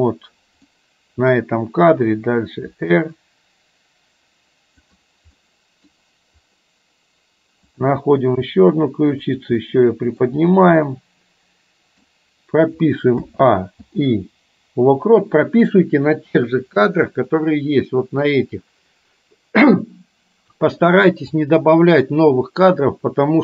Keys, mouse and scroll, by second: 0.8 middle click, 2.8 r, 5.5 middle click, 7.7 click, 8.6 r, 9.7-10.3 middle drag, 11.0-12.1 middle drag, 13.3 a, 13.8 i, 17.3-23.4 drag.